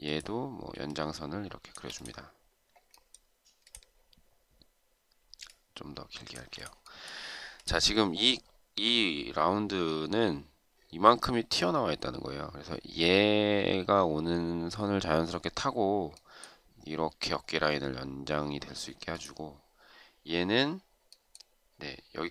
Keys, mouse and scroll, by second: 0.9 shift+click, 5.6 shift+click.